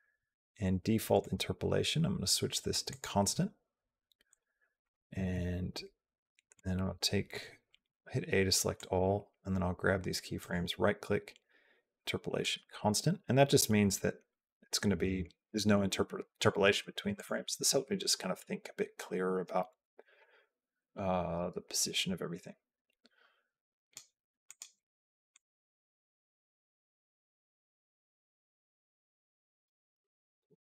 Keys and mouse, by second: 4.6 click, 6.4 click, 7.6 a, 8.6 click, 10.2-12.3 right drag, 12.5 click, 13.4-15.3 drag, 17.0 click, 17.4-23.7 drag, 24.3 click, 25.1-29.5 drag.